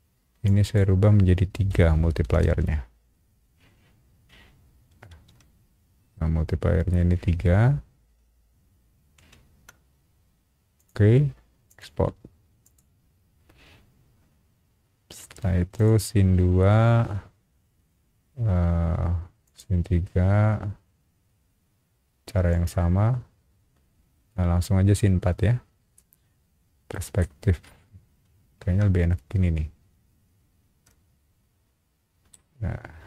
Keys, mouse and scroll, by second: 0.4 click, 1.7 KP_3, 2.4 shift+q, 5.1 shift+w, 9.2 shift+q, 10.7 click, 11.7 click, 12.6 click, 15.7 click, 19.4 click, 22.5 click, 27.2-32.3 middle drag.